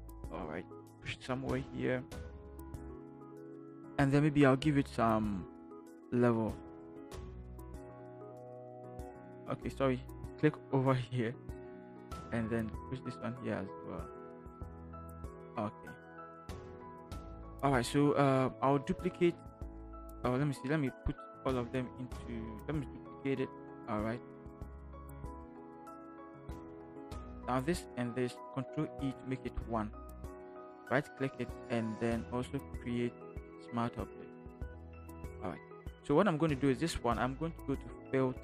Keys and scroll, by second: 1.0 ctrl+shift+Return, 1.5 ctrl+shift+v, 23.5 ctrl+j, 29.0 ctrl+e.